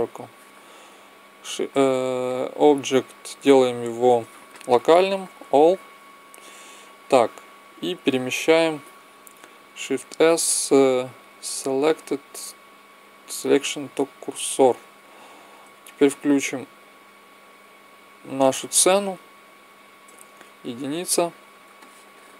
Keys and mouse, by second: 1.3 click, 2.1-3.7 drag, 6.2-8.0 drag, 9.6 shift+s, 17.2-18.2 drag, 20.2 KP_1, 21.6-22.3 middle drag.